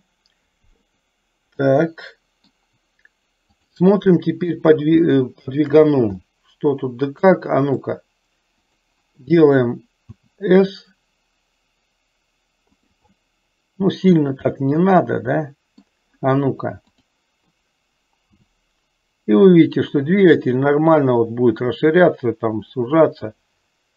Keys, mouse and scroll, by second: 1.8 middle click, 3.8 click, 5.2 shift+middle click, 6.4-8.1 middle drag, 8.7 click, 10.3 s, 13.3-14.4 middle drag, 13.3 scroll up 1, 14.3 scroll down 1, 14.8-16.1 middle drag, 18.4 s.